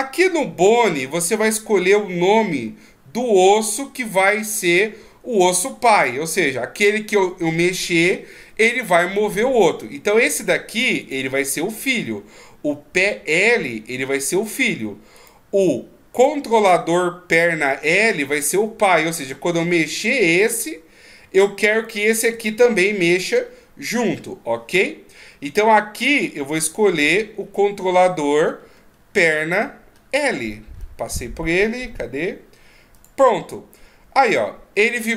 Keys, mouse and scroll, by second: 11.0 right click, 15.2 right click, 19.9 r, 21.7 right click, 22.3 r, 26.6 click.